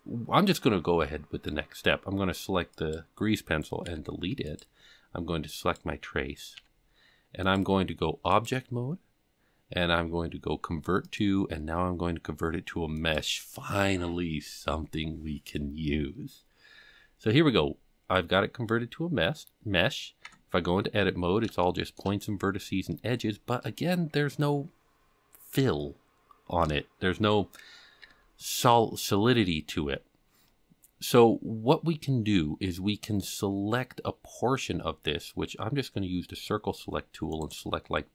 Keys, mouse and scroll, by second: 2.7 click, 3.8 x, 5.6 click, 6.5 g, 8.3-13.1 drag, 17.1-18.6 scroll up 2, 18.7-19.6 scroll down 2, 20.2 Tab, 20.9-21.6 scroll up 5, 21.6 shift+middle click, 22.2-23.1 scroll up 2, 23.1-23.6 scroll down 5, 23.6 middle click, 28.0 KP_7, 30.4-31.1 scroll down 4, 31.2-32.5 scroll up 5, 34.9 c, 38.0-38.1 scroll up 2.